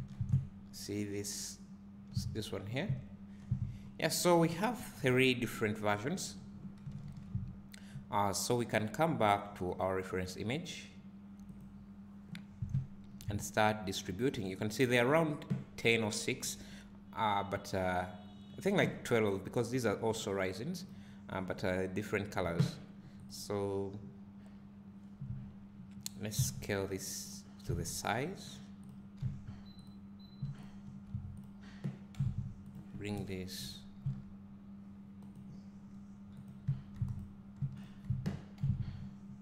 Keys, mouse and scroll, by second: 0.3 `, 2.2 scroll up 1, 3.0 `, 3.5-3.8 scroll down 1, 5.0 KP_7, 7.1 alt+a, 9.8-23.5 drag, 26.3 s, 27.6 s, 28.9 click, 29.2 s, 30.6 shift+click, 31.4 click, 32.1 g, 36.5-37.2 drag, 37.8 shift+click, 38.6 g.